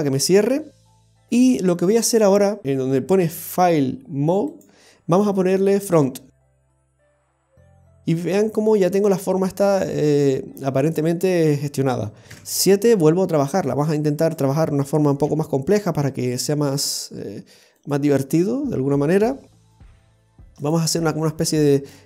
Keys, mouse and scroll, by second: 1.3-2.6 scroll up 12, 2.6-3.5 scroll up 1, 3.5 click, 6.3-6.6 scroll down 2, 6.6 middle click, 12.3 KP_7, 14.2 right click, 15.2 g, 17.7 right click, 17.9 g, 22.0 right click.